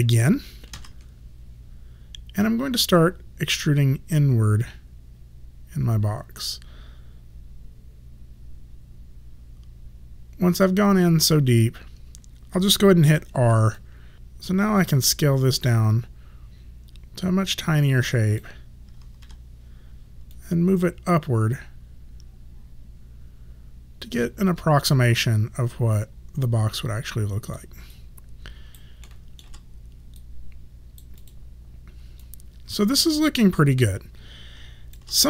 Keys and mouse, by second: 0.8 ctrl+e, 3.6 click, 13.1 r, 13.8 alt+click, 14.9 click, 19.3 w, 20.4 click, 26.5 alt+click, 28.0 alt+right click, 29.1 alt+middle click, 30.3 right click, 31.3 click, 32.3 alt+click.